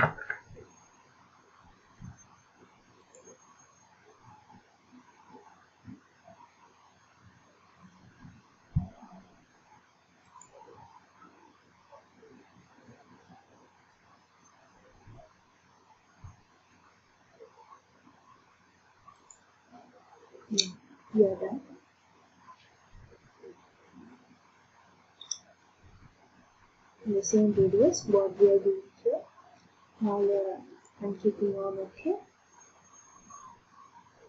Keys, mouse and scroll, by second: 3.2 ctrl+click, 4.2 ctrl+click, 10.5 ctrl+click, 11.5 ctrl+click, 19.4 ctrl+click, 30.8 click.